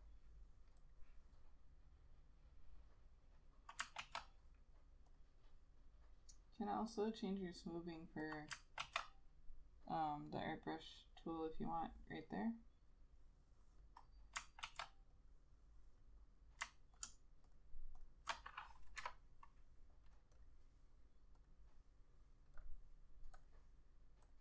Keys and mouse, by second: 4.2 ctrl+z, 9.0 ctrl+z, 14.8 ctrl+z, 17.1 ctrl+click, 19.1 Delete, 20.5 double click.